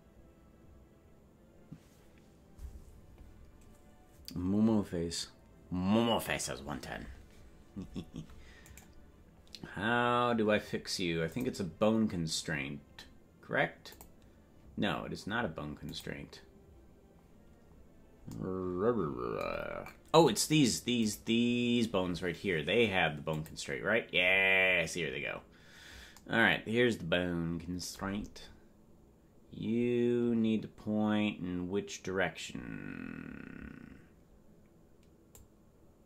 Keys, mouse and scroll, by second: 9.0 right click, 11.3 click, 13.9 click, 15.8 click, 20.4 right click, 23.3 click, 23.3 right click, 35.3-36.0 drag.